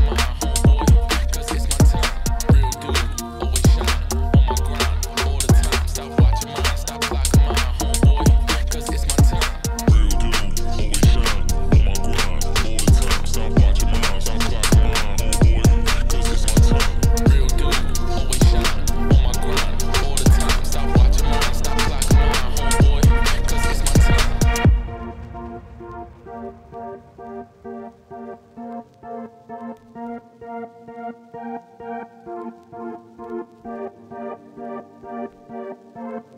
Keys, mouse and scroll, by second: 3.0 Tab, 3.4 click, 4.3 Tab, 11.6 alt+click, 19.1 shift+middle click, 19.3 e, 21.5 alt+click, 28.7 middle click, 28.9 g, 29.8-36.3 drag.